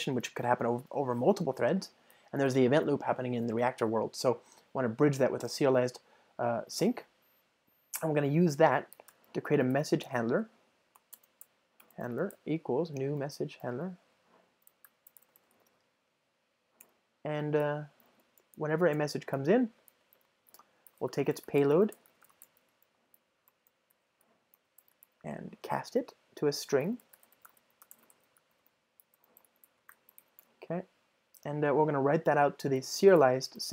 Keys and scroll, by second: 11.1 Return, 13.7 Return, 13.8 alt+BackSpace, 16.8 Return, 23.6 Return.